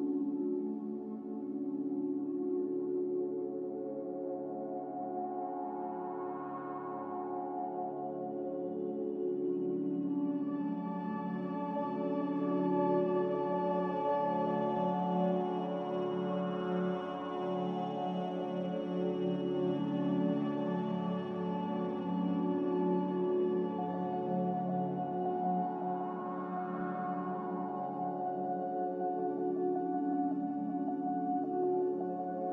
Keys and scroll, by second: 3.7 z, 5.0 Escape, 7.8-8.5 typing, 20.6 ctrl+c, 25.7 a, 27.8 m.